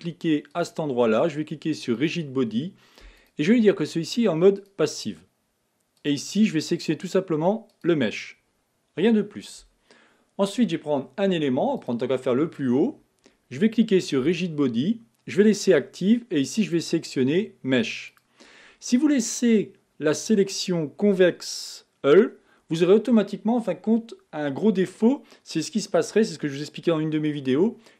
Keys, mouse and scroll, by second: 0.7 click, 2.0-9.0 drag, 11.8 click, 14.0-19.7 drag, 20.6-23.7 drag.